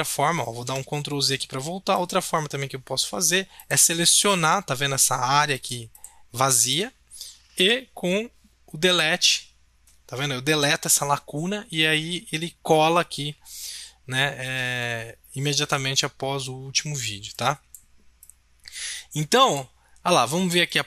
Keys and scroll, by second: 0.5 ctrl+z, 9.2 Delete.